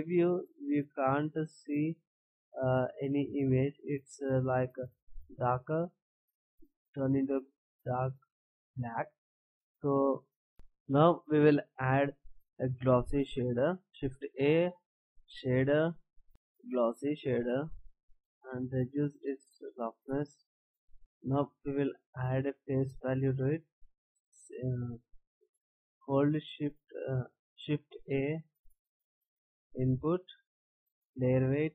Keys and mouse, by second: 14.9 shift+a, 18.5 click, 27.7 shift+a.